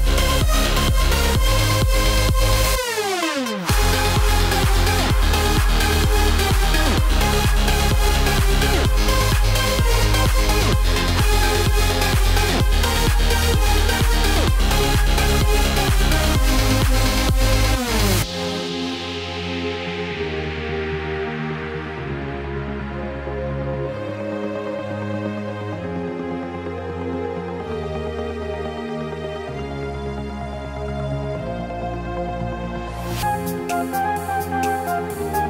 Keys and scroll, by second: 7.1 ctrl+BackSpace.